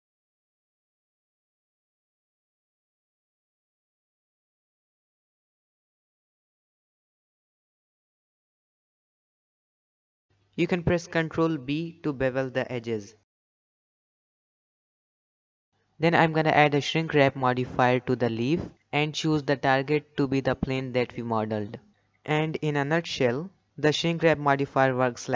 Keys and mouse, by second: 0.1 KP_7, 0.4 shift+middle click, 0.5 g, 1.5 ctrl+s, 1.8 g, 3.0 Tab, 3.5 s, 4.2 ctrl+r, 4.8 alt+a, 4.9 alt+click, 5.2 alt+shift+click, 5.5 KP_1, 5.8 shift+middle click, 5.9 g, 6.5 s, 7.6 ctrl+r, 7.7 middle click, 7.9 ctrl+r, 8.3 ctrl+r, 8.6 alt+click, 8.9 alt+shift+click, 9.2 KP_1, 9.5 shift+middle click, 9.8 s, 11.0 g, 12.0 s, 12.9 ctrl+b, 13.8 middle click, 14.5 Tab, 14.5-15.5 middle drag, 15.7 shift+middle click, 16.6-16.9 middle drag, 17.7-19.3 drag, 20.6 click, 22.2-24.8 middle drag.